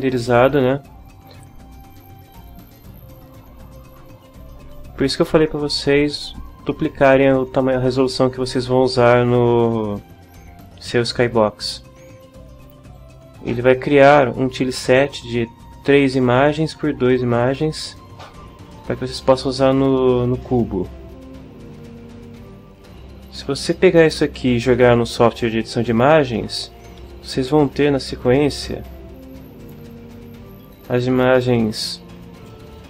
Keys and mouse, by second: 29.6 click, 29.9-31.6 middle drag, 31.9 click.